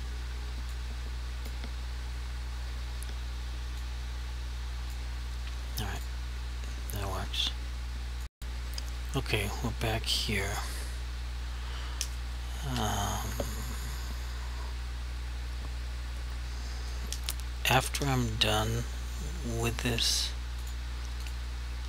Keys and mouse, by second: 0.9 click, 3.9 click, 6.0 click, 20.6 click.